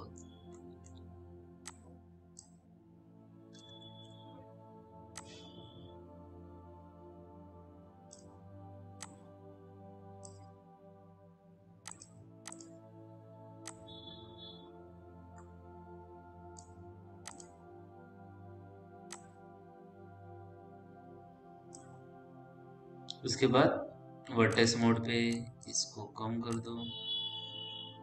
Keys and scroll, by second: 4.2 ctrl+z.